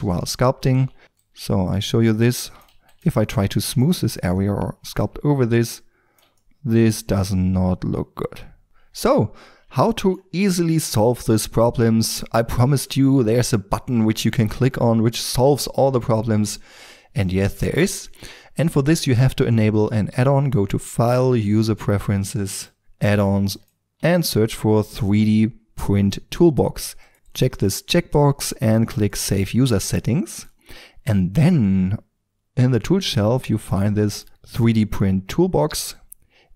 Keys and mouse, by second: 0.8 ctrl+d, 0.8 ctrl+f, 1.0 ctrl+d, 2.7 f, 4.0 3, 7.6-8.2 middle drag, 8.6-16.1 middle drag, 20.9-26.4 drag, 34.0-36.3 drag.